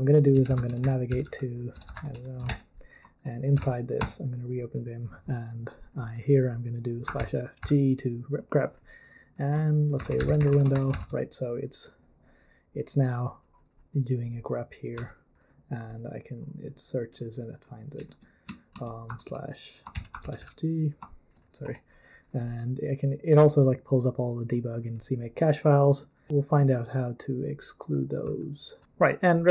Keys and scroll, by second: 0.0-4.0 typing, 6.8-8.1 typing, 9.8-11.5 typing, 14.9 Return, 18.8-21.6 typing, 19.9 ctrl+c, 26.3 super+l, 28.2 super+l.